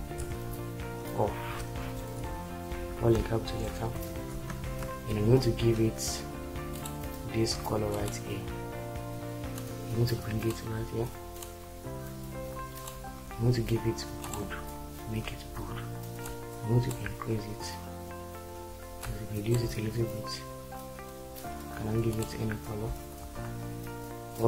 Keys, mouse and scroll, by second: 0.2 shift+5, 1.5 Return, 1.9-3.9 typing, 4.7 ctrl+space, 23.2 ctrl+z.